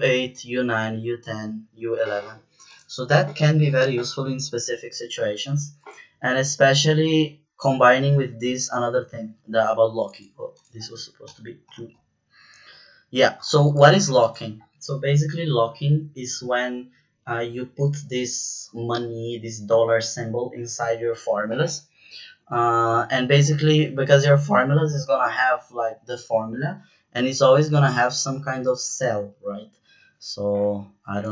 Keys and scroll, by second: 0.4 Down, 1.1 Down, 11.6 KP_2, 12.6 Return.